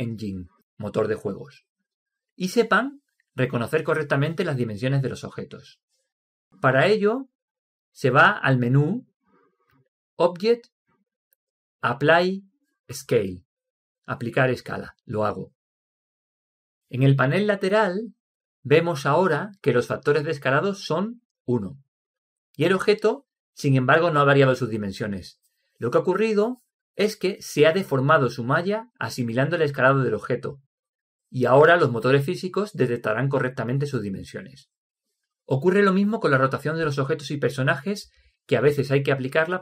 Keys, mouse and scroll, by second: 10.6-12.6 drag.